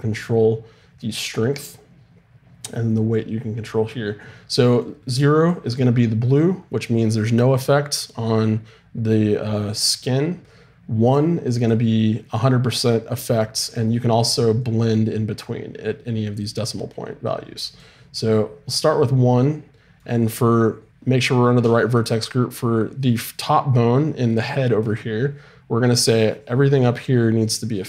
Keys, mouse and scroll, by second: 1.5-4.8 right drag, 4.8-19.4 drag, 19.4-23.6 middle drag, 24.1-25.6 scroll up 1, 25.6 middle click, 26.2-27.8 drag.